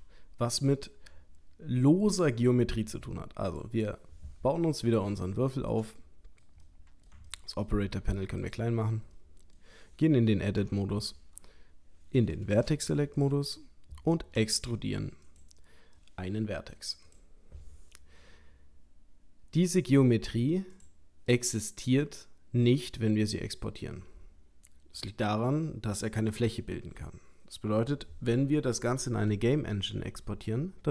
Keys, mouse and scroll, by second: 4.4 scroll down 1, 5.1 shift+middle click, 5.1 scroll down 3, 5.7 shift+middle click, 6.6 middle click, 7.3 ctrl+middle click, 8.4 click, 9.2 middle click, 10.6 Tab, 12.5 1, 13.2 click, 14.4 e, 16.0 middle click, 17.0 click, 20.7 click, 21.3 middle click, 23.5 middle click.